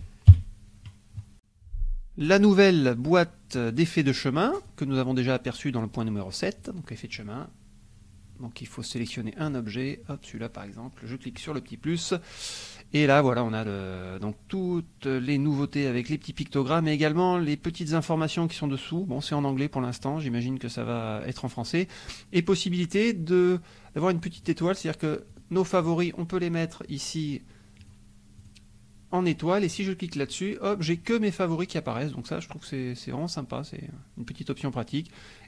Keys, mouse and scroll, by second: 0.3 KP_5, 1.3 click, 4.6 click, 6.5 click, 9.4 click, 10.0 click, 11.3 click, 16.7 click, 19.9 click, 24.3 click, 25.3 click, 25.8 click, 27.8 click, 28.4 click, 30.2 click.